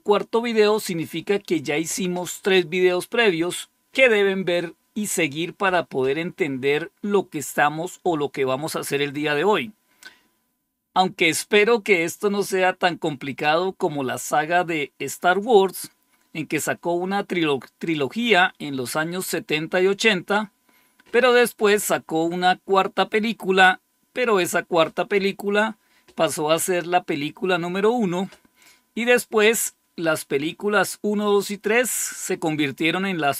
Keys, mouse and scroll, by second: 9.6 scroll down 1.